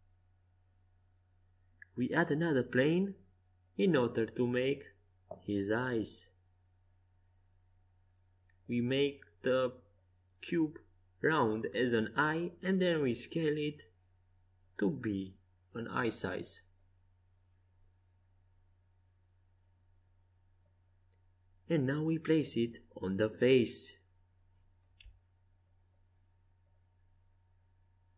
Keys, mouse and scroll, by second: 0.0 Tab, 0.8 shift+a, 6.2 Tab, 6.8 w, 7.7 click, 7.7 middle click, 7.7 right click, 10.2 w, 12.2 s, 20.5-25.4 drag, 25.9-28.1 middle drag.